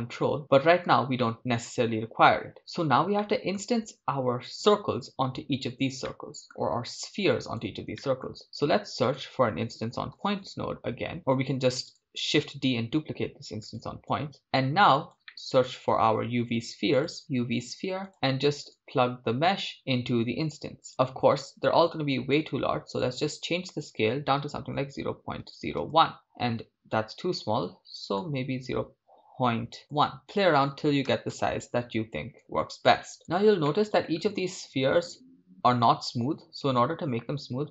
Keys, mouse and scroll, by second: 0.0-0.4 middle drag, 1.2-2.5 shift+middle drag, 3.2-6.0 shift+middle drag, 6.1-7.0 middle drag, 7.1-7.9 drag, 7.9 middle click, 8.4 shift+a, 13.8-15.2 drag, 15.3-16.0 middle drag, 16.0 shift+a, 19.6-20.9 drag, 22.3-31.4 shift+drag, 32.8 shift+click, 33.2 scroll up 3, 33.8-34.4 shift+middle drag, 34.4 scroll up 1, 37.4 shift+a.